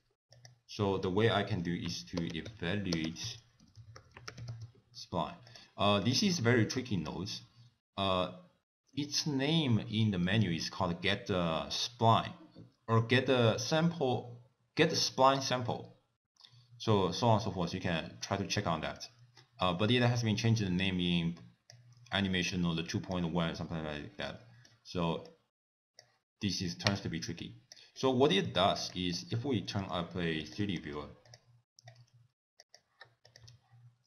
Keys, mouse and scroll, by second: 0.2-0.5 scroll up 2, 0.4 click, 1.4 ctrl+a, 6.9 click, 17.3 click, 18.1 middle click, 18.9 middle click, 19.8 click, 22.6 click, 24.5 middle click, 25.4 click, 27.0 click, 27.5 click, 28.1 middle click, 28.5 click, 28.9 click, 29.4 ctrl+a, 30.5 click, 30.9 shift+d, 32.0 click, 33.3 click, 33.5 x.